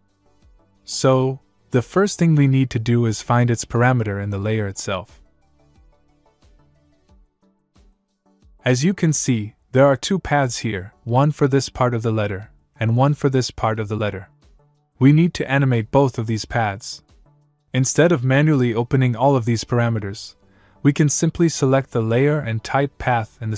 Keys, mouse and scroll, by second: 1.1 click, 4.2 click, 8.9 click, 14.4 click, 16.0 click, 19.7 click, 21.8 click.